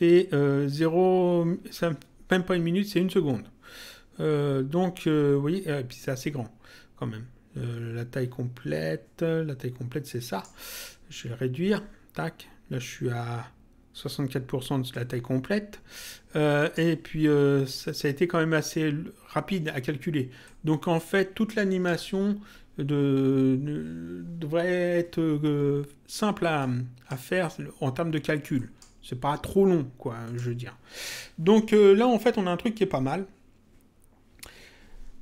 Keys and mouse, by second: 4.9 click, 14.9 click, 20.4 click, 26.5 click, 28.5 click, 30.2 click.